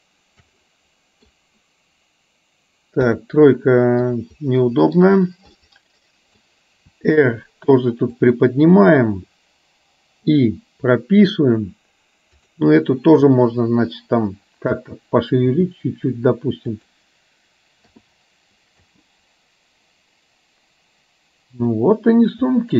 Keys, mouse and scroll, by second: 0.6 middle click, 3.1 KP_3, 4.3 middle click, 5.6 middle click, 7.5 r, 10.3 i, 12.4 drag, 15.5 r, 17.9 i, 18.9 space, 21.8-22.7 middle drag.